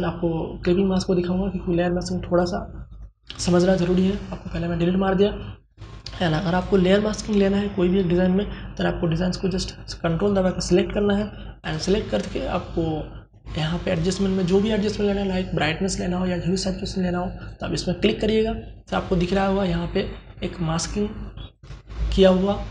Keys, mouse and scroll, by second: 2.6 Delete, 5.9 click, 13.2 click, 16.8 click, 20.9 alt+click.